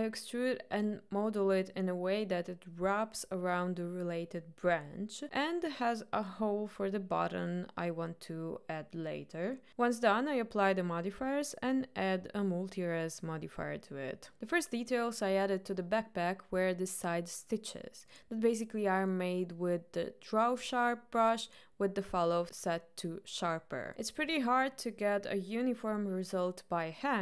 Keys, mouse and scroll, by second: 0.0 middle click, 0.4 e, 0.6 r, 1.6 middle click, 1.6 e, 1.9 middle click, 2.0 e, 2.4 middle click, 2.7 middle click, 3.0 middle click, 3.4 e, 3.9 middle click, 4.1 alt+click, 4.3 g, 4.8 alt+click, 5.1 g, 5.6 middle click, 5.6 click, 5.9 click, 6.1 ctrl+b, 7.4 click, 7.8 Delete, 8.2 middle click, 8.9 click, 9.2 middle click, 9.5 click, 10.1 Tab, 10.5 click, 13.0 click, 14.0 click, 14.9 click, 16.1-17.1 middle drag, 18.0-19.1 middle drag, 20.4 click, 21.2-24.0 drag, 24.3 ctrl+right click, 24.8 ctrl+right drag, 25.5-25.9 ctrl+right drag, 26.8-27.2 ctrl+right drag.